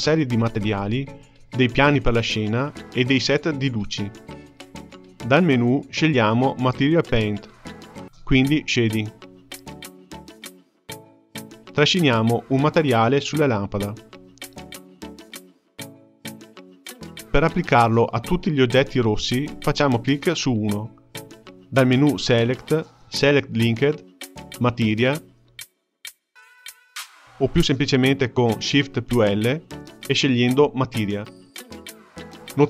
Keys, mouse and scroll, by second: 5.6-8.6 drag, 10.2 click, 12.7-13.7 drag, 14.2-14.8 middle drag, 14.8-15.4 scroll up 3, 15.4-17.0 shift+middle drag, 18.5 click, 21.6-24.7 drag, 29.1 shift+l.